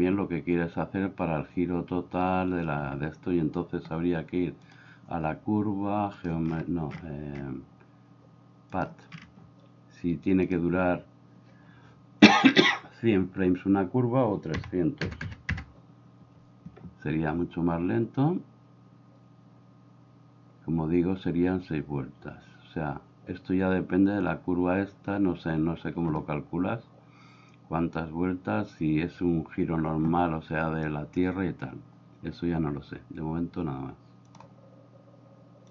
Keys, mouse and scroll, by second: 2.9 Escape, 4.6 click, 6.2 click, 8.7 click, 10.5-15.5 drag, 15.3 KP_0.